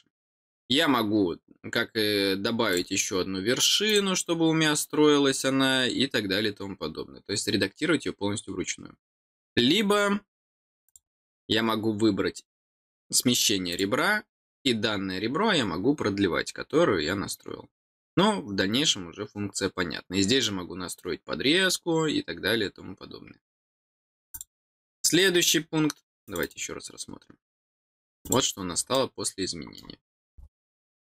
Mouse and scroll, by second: 10.8 click, 13.6 click, 24.3 click, 26.2 click, 27.5 middle click, 28.2 click, 28.9 middle click, 30.0-30.4 scroll down 2.